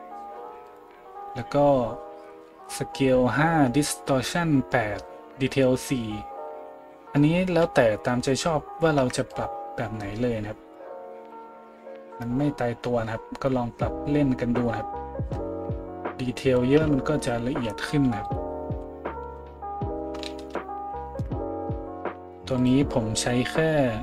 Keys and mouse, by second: 18.2 middle click, 18.2 right click, 18.8 z, 19.2 z, 20.4 shift+z, 21.2 shift+z, 22.7-24.0 middle drag.